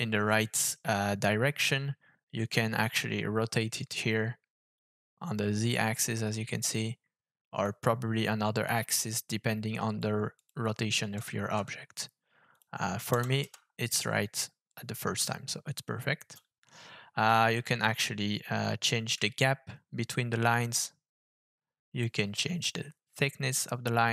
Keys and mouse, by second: 4.0-7.6 drag, 9.0-10.0 drag, 10.3-11.9 drag, 12.5-14.0 drag, 19.1-22.0 shift+drag, 22.6-24.1 shift+drag.